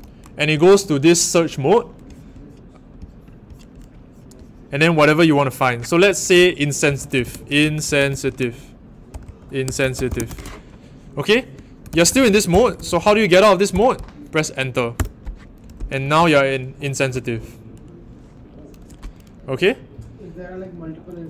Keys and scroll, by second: 6.8-13.7 typing, 15.0 Return, 15.9 typing.